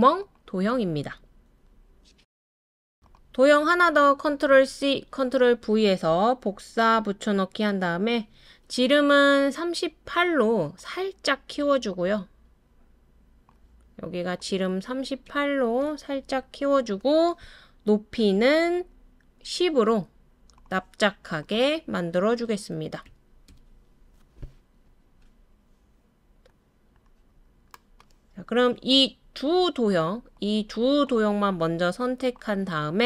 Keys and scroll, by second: 4.7 super+c, 5.1 super+v, 15.2-15.8 typing, 16.3 Return, 18.4 typing, 22.5-23.5 typing, 23.5 Return.